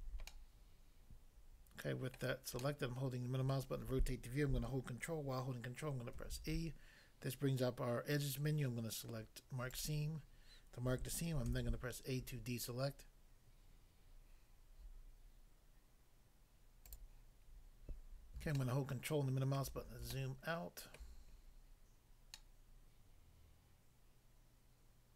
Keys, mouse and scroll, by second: 0.3 middle click, 2.2 middle click, 2.6 middle click, 3.5 middle click, 6.1 ctrl+e, 9.7 click, 9.8 click, 11.5 a, 16.9 click, 17.1 click, 18.6 ctrl+middle click, 20.1 shift+middle click.